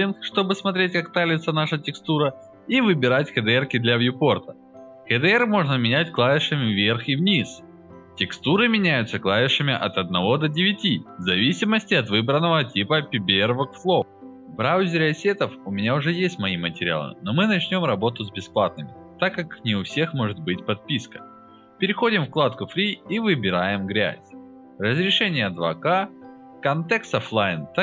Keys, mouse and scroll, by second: 0.2 click, 1.5 click, 1.7 click, 2.1 alt+right click, 2.6 click, 2.8 click, 3.1 alt+right click, 4.0 click, 4.2 click, 6.4 Down, 6.6 Up, 7.4 Down, 7.8 Up, 12.2 click, 13.0 click, 14.2 click, 14.7 click, 18.2 click, 20.5 click, 21.5 middle click, 21.6 scroll down 1, 21.9 click, 24.4 click, 25.6 click.